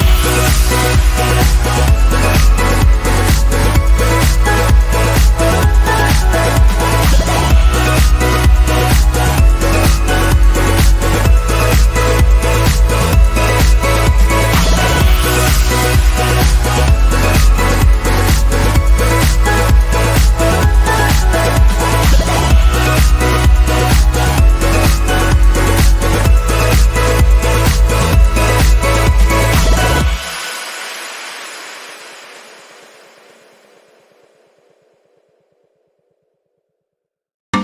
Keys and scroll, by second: 14.9 ctrl+a, 15.7-16.6 typing, 17.2 Return, 34.8 ctrl+z.